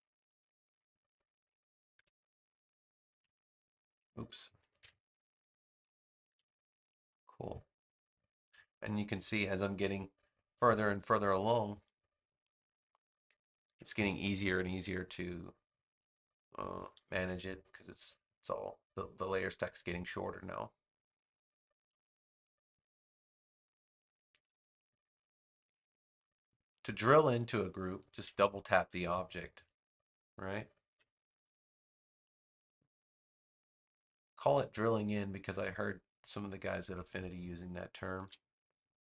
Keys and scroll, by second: 1.9 super+x, 3.0 super+v, 4.6 super+z, 6.2 super+v, 10.4 space, 13.6 super+x, 17.2 super+v, 22.4 space, 28.0 super+x, 30.8 super+v, 38.1 super+x.